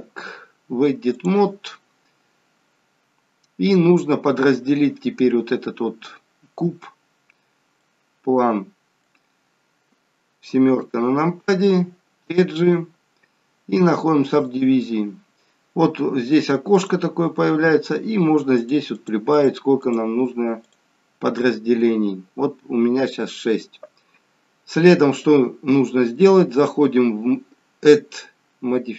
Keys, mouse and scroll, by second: 7.7 middle click, 10.7 KP_7, 12.6 click, 16.8 click, 18.5 click, 18.8 click, 19.3 click, 20.6 click, 26.5 click.